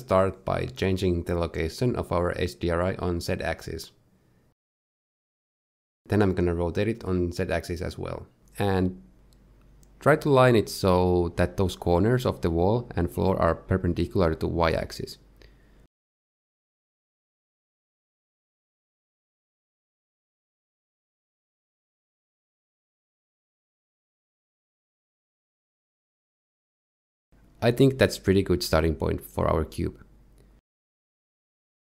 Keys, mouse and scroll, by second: 0.3 shift+middle click, 2.2 shift+click, 11.8 KP_7, 17.1 click, 21.6 shift+click, 23.1 click, 27.3 shift+click.